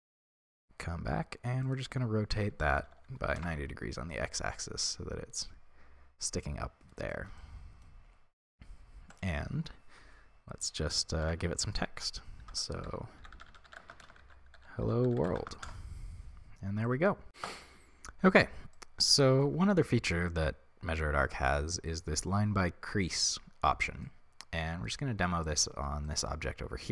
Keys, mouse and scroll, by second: 3.4 Return, 4.5-15.6 middle drag, 15.6-16.8 drag, 15.6 l, 15.7 Return, 16.8-26.9 middle drag, 26.5-26.8 scroll up 2.